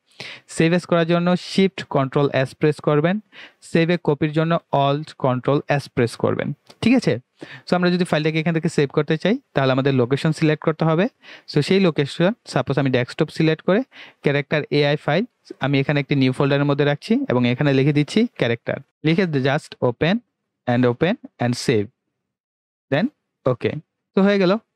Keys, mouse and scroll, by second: 8.7 click, 12.5 click, 16.2 click.